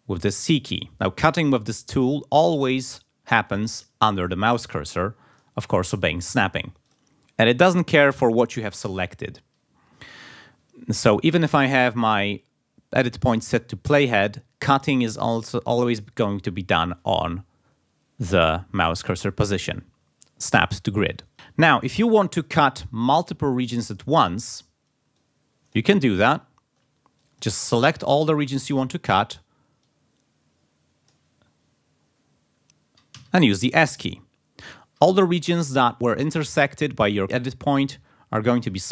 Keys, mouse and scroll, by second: 0.3 c, 3.4 click, 5.3 click, 6.8 click, 11.0-13.3 drag, 13.9 click, 18.7 click, 21.3 g, 21.6-22.0 ctrl+scroll down 2, 22.5 click, 23.2 scroll up 2, 23.8 click, 25.1 click, 26.2 ctrl+scroll up 2, 27.2-28.3 ctrl+drag, 29.8-31.4 drag, 33.1 s, 38.5 click.